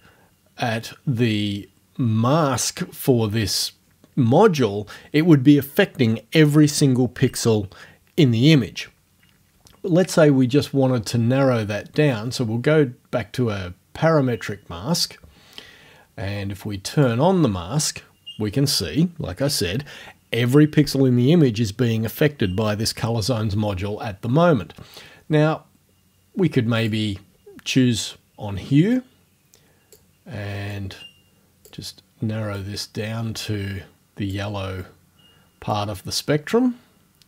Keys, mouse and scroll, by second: 0.5 scroll down 2, 10.8-11.1 scroll down 2, 11.9 scroll up 2, 14.0-14.6 scroll down 4, 17.0 click, 26.8 click, 29.0-30.1 drag, 30.7-31.9 drag, 32.6-34.5 drag, 35.7-37.2 drag.